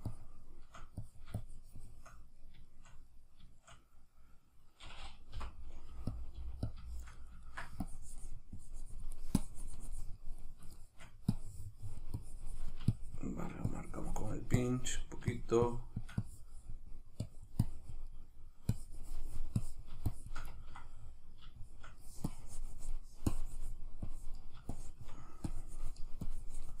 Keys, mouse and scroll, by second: 2.4-7.9 shift+middle drag, 5.4 p, 6.2 click, 6.4 f, 6.8 click, 7.9-10.4 drag, 10.4 middle click, 11.4-18.1 drag, 18.1 middle click, 18.7-20.5 drag, 20.5-22.3 ctrl+middle drag, 22.3-26.8 drag.